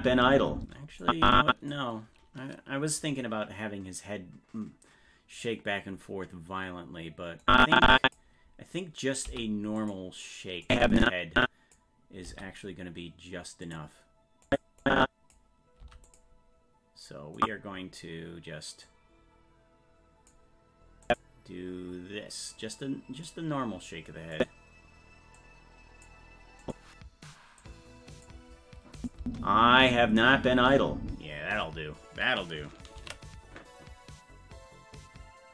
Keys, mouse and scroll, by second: 1.0 click, 7.4 click, 9.3 i, 10.7-11.7 drag, 12.3 i, 14.5 click, 14.8 click, 15.8 i, 17.4 click, 18.9-20.3 drag, 21.1 click, 22.5 click, 24.3 click, 25.4 click, 26.6 click, 27.6 click, 29.0 click, 29.2 space, 33.4 ctrl+s.